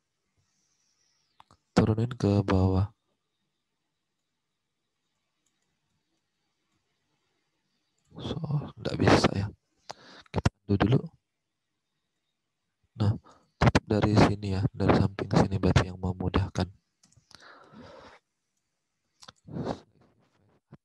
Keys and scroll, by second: 5.6 ctrl+z, 8.2 ctrl+z, 10.3 ctrl+z, 13.3 space.